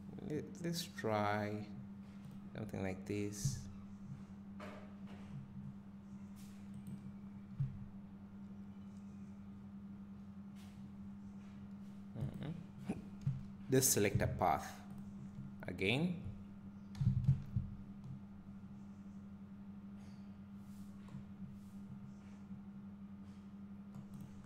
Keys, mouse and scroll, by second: 2.3-6.8 drag, 3.5 g, 6.8 right click, 6.9 scroll down 1, 7.6 g, 12.3 right click, 12.7 scroll up 1, 13.3 `, 15.0 click.